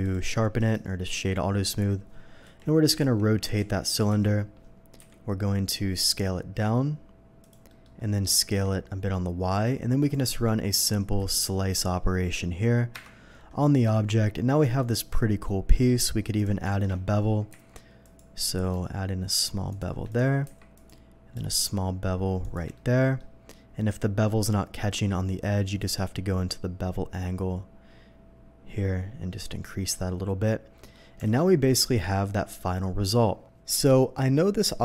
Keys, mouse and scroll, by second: 0.6 right click, 0.6 q, 2.4 r, 3.4 x, 3.4 9, 3.5 0, 4.0 Return, 4.9 s, 7.4 click, 7.7 middle click, 8.2 middle click, 8.9 s, 8.9 y, 10.0 click, 11.3 shift+click, 12.9 ctrl+KP_Divide, 13.8-14.2 middle drag, 14.6 middle click, 15.7 middle click, 16.3 click, 16.7 shift+middle drag, 17.5 q, 18.0 click, 19.7 shift+click, 20.1 shift+click, 20.4 q, 20.7 click, 22.4 shift+click, 22.7-23.1 shift+middle drag, 25.6 click, 27.3-29.8 drag, 30.7 middle click, 31.2 alt+a, 31.6-32.5 middle drag, 33.4 middle click.